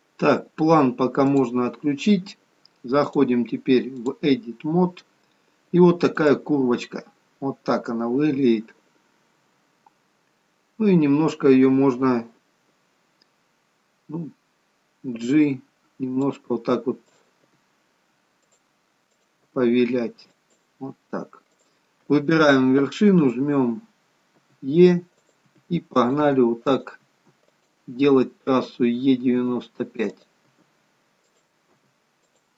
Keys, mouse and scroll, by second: 1.3 click, 3.0 click, 7.1 click, 7.1-8.1 scroll up 6, 9.6-10.0 scroll down 2, 10.5-11.3 scroll down 4, 15.1 g, 17.1 click, 17.4 g, 19.1 click, 19.4 g, 21.5 click, 23.6-24.4 scroll down 7, 24.4 e, 25.5 e, 26.2 e, 27.1 e, 28.2-29.4 scroll down 2, 29.4-29.8 scroll down 2, 29.4 e, 30.6 e.